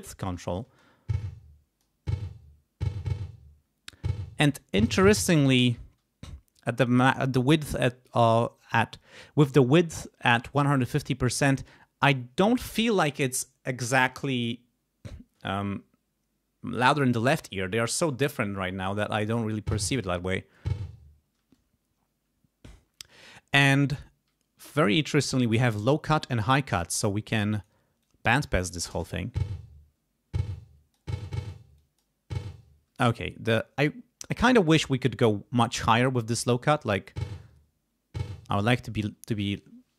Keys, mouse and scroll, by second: 0.6 space, 1.2 click, 5.6 space, 19.2 space, 21.4 space, 27.3 click, 28.0 click, 28.9 space, 30.5 click, 31.8 click, 32.9 space, 36.7 space, 38.4 space.